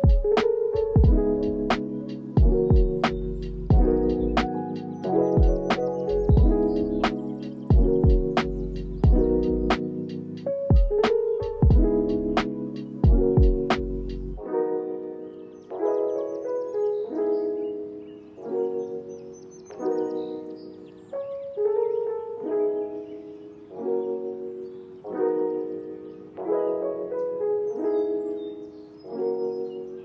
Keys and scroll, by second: 3.3 ctrl+s, 5.3 space, 12.8 space, 13.8 ctrl+s, 18.5 ctrl+space, 19.3 o, 19.3 f, 20.4 Return, 21.0 ctrl+s, 22.9 ctrl+a, 26.0 ctrl+s, 29.7 ctrl+k.